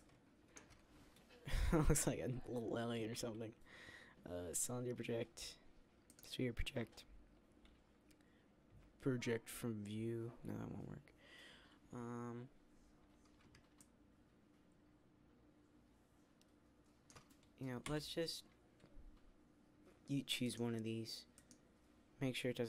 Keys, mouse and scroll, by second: 17.7 u.